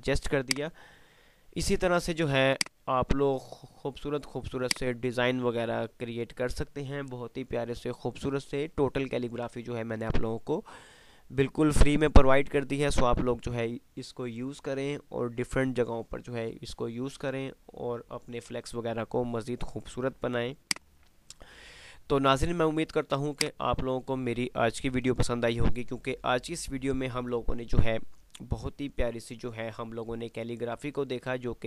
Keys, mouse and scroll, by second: 0.5 click, 1.1 F2, 2.7-4.8 drag, 20.8 click, 21.1 F3, 22.7 F2, 23.5 click, 23.8 F2, 23.9 typing.